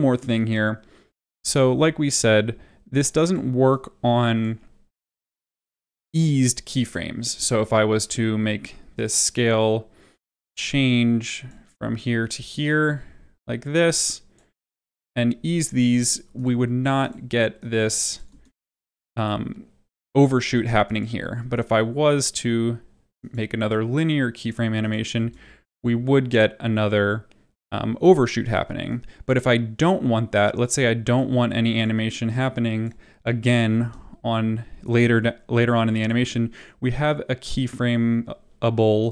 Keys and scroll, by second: 18.2 space, 25.1 space, 33.7 space.